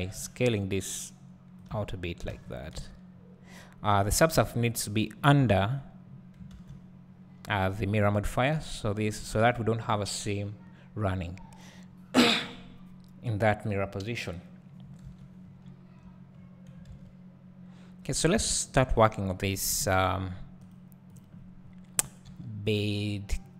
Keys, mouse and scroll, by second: 0.0 alt+s, 1.6 click, 1.8 Tab, 2.3 alt+a, 2.8 Tab, 3.1-4.6 scroll up 1, 4.6-20.7 drag, 5.4 Tab, 15.5 scroll down 2, 15.6 `, 16.3-17.8 scroll down 2, 17.8 s, 19.7 KP_1, 22.3 g.